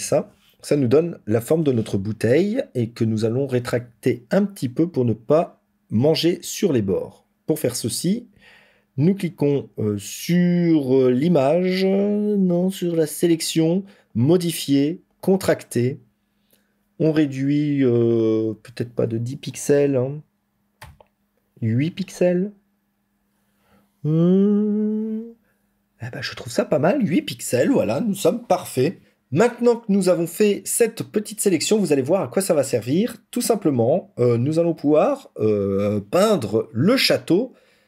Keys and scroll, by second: 0.0 ctrl+=.